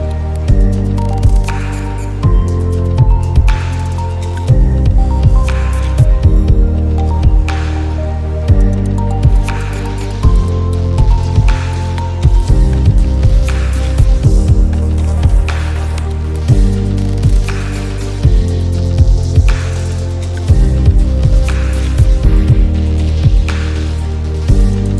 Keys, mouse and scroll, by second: 5.9 click, 7.8-17.9 drag, 13.0-15.1 drag, 18.6-24.9 drag.